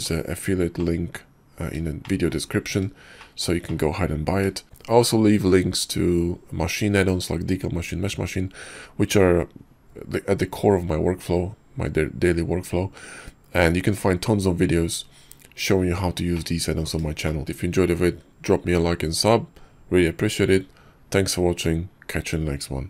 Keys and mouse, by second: 0.8-1.7 middle drag, 2.0 shift+middle drag, 3.2 shift+middle drag, 3.7-4.3 middle drag, 16.3 middle click, 17.2 shift+middle click.